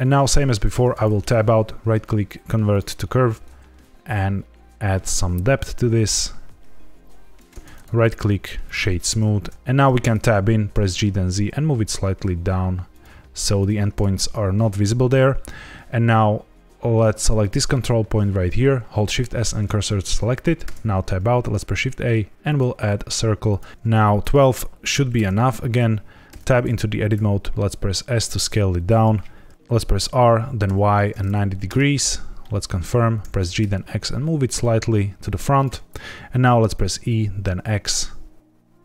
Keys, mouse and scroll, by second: 0.7 Tab, 1.1 right click, 4.1 shift+click, 7.7 right click, 9.5 Tab, 10.2 Tab, 10.6 g, 10.8 z, 12.8 shift+click, 17.3 click, 18.6 shift+s, 20.6 Tab, 21.1 shift+a, 23.4 click, 24.1 click, 26.2 Tab, 27.1 s, 28.9 click, 29.9 r, 30.6 y, 30.8 KP_9, 30.9 KP_0, 31.6 KP_Enter, 32.3 middle click, 33.1 g, 33.3 x, 35.4 shift+click, 36.7 e, 37.0 x.